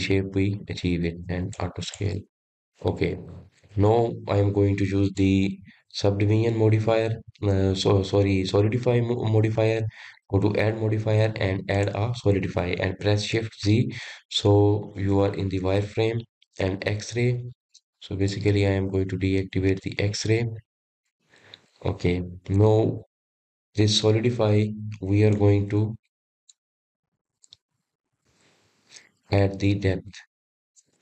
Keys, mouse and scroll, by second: 2.3 click, 2.7 click, 3.1-4.3 middle drag, 4.3 click, 5.9 click, 11.0-14.1 drag, 14.6 shift+z, 16.1-17.3 middle drag, 17.3-17.6 scroll up 3, 17.8-19.1 scroll down 2, 19.1-21.3 drag, 21.3-24.4 middle drag, 26.2-28.0 drag, 28.0-28.7 scroll up 2, 28.7-29.1 scroll down 1, 29.1-31.0 middle drag.